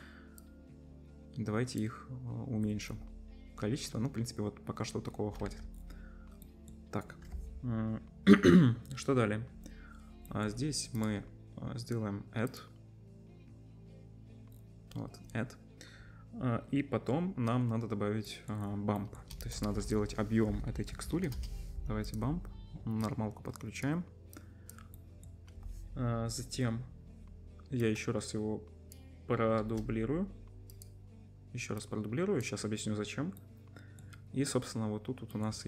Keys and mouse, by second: 0.4-3.1 middle drag, 0.4-3.1 right drag, 5.6 ctrl+s, 18.5 click, 18.5-19.3 middle drag, 18.5 right click, 18.6 drag, 18.6 right drag, 19.4 shift+a, 21.4 middle click, 22.3 click, 23.0-25.1 middle drag, 24.7 click, 24.7 right click, 25.1 click, 25.1 right click, 29.6 shift+d, 30.8 click, 33.6 middle click, 35.3 click, 35.3-35.6 middle drag, 35.3 right click, 35.4-35.6 drag, 35.4-35.6 right drag.